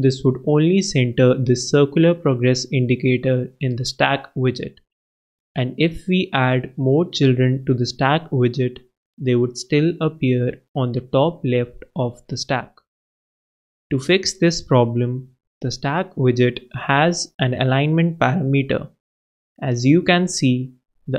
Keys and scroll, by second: 19.7 super+Right, 20.7 super+b.